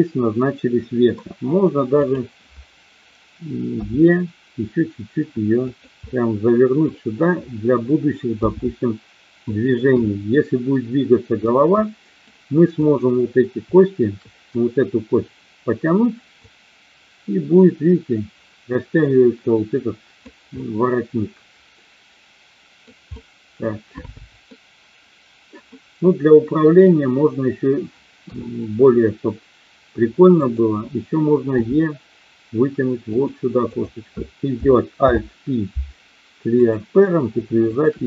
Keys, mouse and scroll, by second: 3.7 e, 5.7 click, 6.0 middle click, 8.4 g, 9.4 click, 10.0-11.4 middle drag, 11.8 middle click, 12.8 click, 16.4-20.3 drag, 20.5-22.9 middle drag, 23.2-24.4 middle drag, 25.8-26.8 middle drag, 28.2 KP_3, 30.3 click, 31.4 e, 33.7 click, 35.0 alt+p.